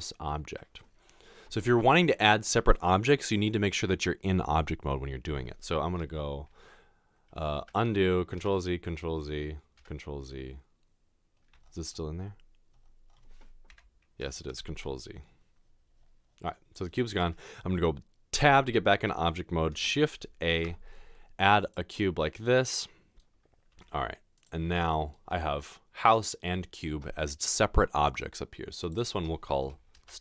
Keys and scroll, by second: 7.6 ctrl+z, 8.4 ctrl+z, 14.5 ctrl+z, 18.4 Tab, 20.2 a, 23.7 typing, 30.1-30.2 typing.